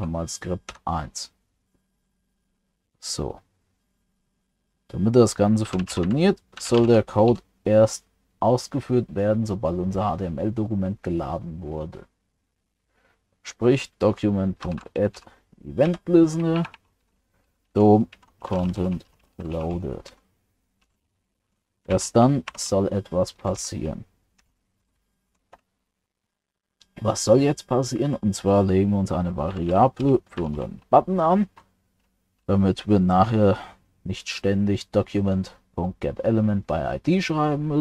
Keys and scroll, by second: 22.5 ctrl+alt+7.